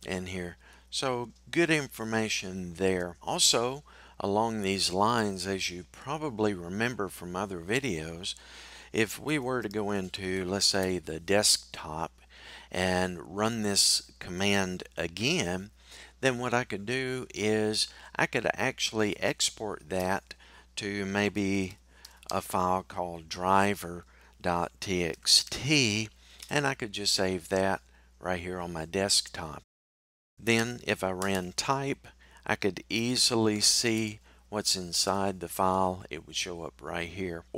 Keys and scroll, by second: 31.0 typing.